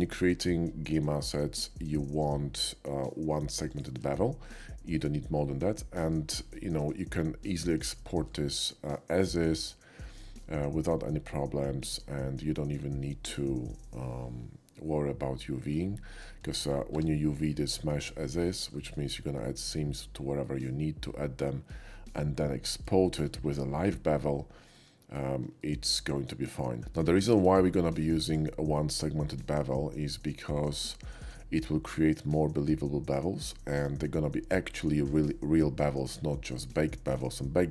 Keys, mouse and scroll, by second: 3.7 shift+click, 4.6-6.1 shift+middle drag, 6.6 shift+middle click, 7.0-7.5 shift+middle drag, 8.0 shift+middle drag, 9.6 shift+middle click, 10.0-11.9 shift+middle drag, 15.7-16.2 middle drag, 16.5 shift+middle click, 16.9 Tab, 17.5 middle click, 18.4 shift+middle click, 20.4-21.7 shift+middle drag, 23.0 shift+middle click, 24.7 shift+middle click, 25.6 shift+middle click, 27.0 Tab, 27.6 shift+Tab, 27.6 middle click, 28.3 click, 28.6 middle click, 30.2-30.6 shift+middle drag.